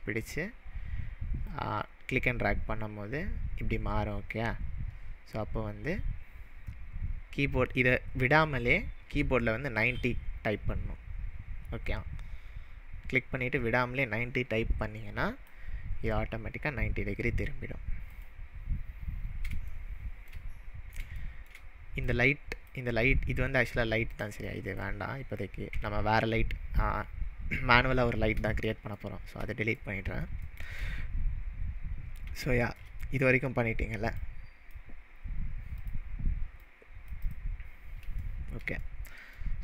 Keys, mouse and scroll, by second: 1.5-15.5 click, 9.4-10.3 typing, 18.1 click, 19.7-20.2 shift+middle drag, 20.7-21.0 scroll down 2, 21.2-22.1 shift+middle drag, 22.1-22.9 drag, 24.2 drag, 24.5-25.0 drag, 25.7 Delete, 28.6 click, 29.0-29.5 shift+middle drag, 32.3-32.9 shift+middle drag, 34.1-34.7 click, 35.8 click, 37.3 drag, 37.6-38.0 scroll up 3, 38.2-39.3 shift+middle drag.